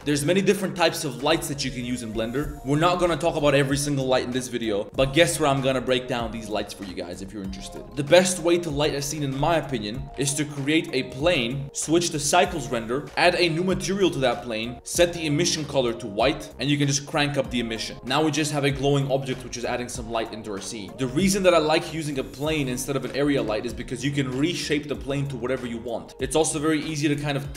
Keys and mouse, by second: 8.2-8.7 drag, 10.0 drag, 10.1 shift+a, 11.6-12.3 drag, 13.3 click, 16.6 click, 21.1 Tab, 21.5 click, 22.0 click, 22.5 Tab, 22.7 shift+a, 23.4 Tab, 24.1 click, 24.9 right click, 25.0 middle click, 25.4 click, 25.6 e, 26.1 ctrl+z, 26.1 shift+d, 26.2 e, 26.9 shift+click, 27.1 e.